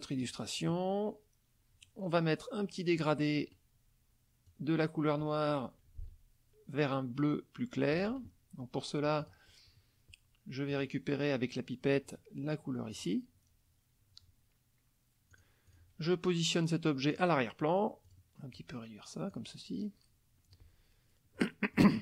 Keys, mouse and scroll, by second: 0.2 click, 3.0 click, 4.5-8.1 drag, 9.2 click, 10.7 click, 12.9 click, 15.3 click, 15.7 click, 17.1 click, 18.1 click, 18.5 click, 21.3 middle click.